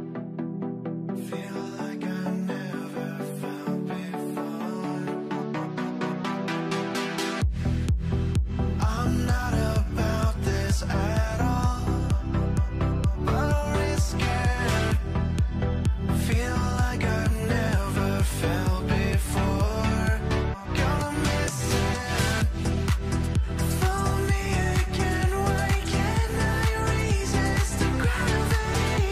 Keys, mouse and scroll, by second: 0.5 middle click, 1.5 scroll, 1.8 q, 2.1 scroll down 1, 2.9 scroll up 1, 5.5 scroll down 1, 5.9 alt+middle click, 6.3 scroll down 1, 6.4 middle click, 6.6 scroll up 1, 6.8 middle click, 7.2 scroll up 1, 8.4 scroll up 1, 9.7-10.2 scroll down 1, 10.2 middle click, 11.7 alt+middle click, 11.9 scroll up 2, 12.3 w, 14.4 w, 14.7 e, 15.9 w, 16.9 r, 18.1 alt+middle click, 19.0 alt+middle click, 19.2 e, 20.9 w, 23.3 w, 25.9 alt+middle click, 27.6 scroll down 1, 28.0 middle click, 28.6 scroll up 1, 28.8 middle click, 29.0 scroll down 1.